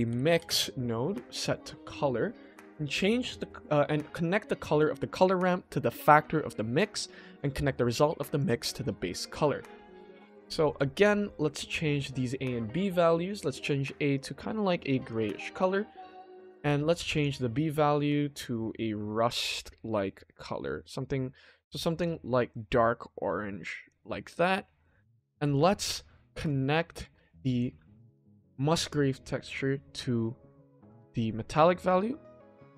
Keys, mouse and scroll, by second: 1.4-1.9 drag, 4.7-6.2 drag, 7.6-8.3 drag, 10.0-11.6 ctrl+middle drag, 11.6 click, 17.1 click, 24.3 shift+middle click, 25.5 shift+middle click, 26.4-28.2 ctrl+middle drag, 29.4-31.5 drag, 31.8 shift+middle click.